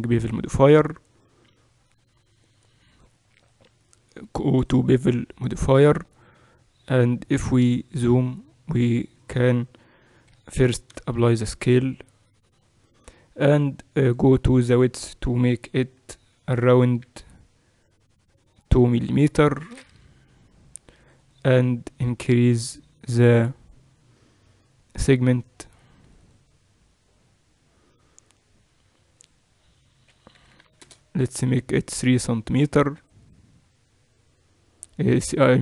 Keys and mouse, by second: 2.9-5.2 drag, 5.4-9.1 middle drag, 9.1-11.0 drag, 11.0 ctrl+a, 14.1-16.3 drag, 16.3 0, 21.0-23.3 drag, 23.1-26.1 middle drag, 26.1-28.2 drag, 28.3-29.3 middle drag, 29.3-33.7 drag, 30.5 0.